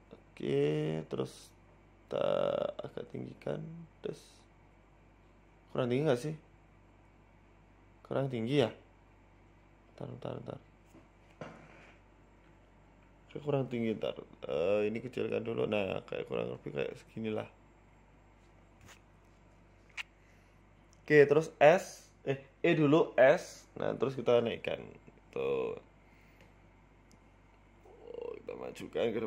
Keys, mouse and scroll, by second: 0.5 s, 2.3 s, 2.3 g, 3.7 click, 4.7 g, 6.9-7.5 scroll up 2, 8.3-8.9 scroll down 3, 8.5-8.9 scroll up 1, 11.5 middle click, 12.1 l, 12.8 KP_1, 14.2 s, 15.1 s, 16.1 click, 16.7 g, 19.4 shift+middle click, 19.9-20.2 scroll up 5, 20.2 shift+middle click, 20.9-21.4 scroll up 2, 21.4 click, 22.0 e, 22.2 s, 24.0 e, 24.8 Tab, 25.0-25.6 scroll down 5, 25.4 shift+middle click, 27.8 Tab, 28.2-29.2 scroll down 6, 28.4 middle click, 28.8 Tab.